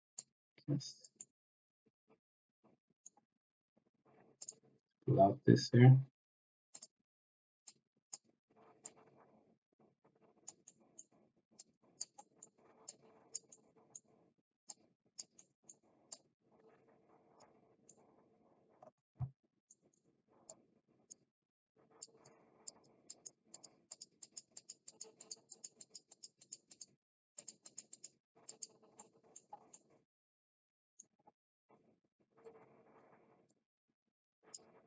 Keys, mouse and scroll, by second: 0.1 click, 1.1-3.0 middle drag, 4.4 click, 6.7 click, 7.7 click, 8.8-10.4 drag, 10.7 middle click, 11.6 click, 12.1 middle click, 12.8 click, 13.5 middle click, 14.6 click, 15.4 middle click, 16.1-17.3 drag, 17.7-19.0 middle drag, 19.6 middle click, 20.4 click, 21.9 click, 22.7 click, 23.0 click, 23.5 click, 23.9 click, 24.1 click, 24.5 click, 24.8 click, 25.1 click, 25.4 click, 25.8 click, 26.0 click, 26.4 click, 26.6 click, 27.3 click, 27.6 click, 27.9 click, 28.5 click, 29.0 middle click, 29.7-31.0 middle drag, 32.4-34.5 drag.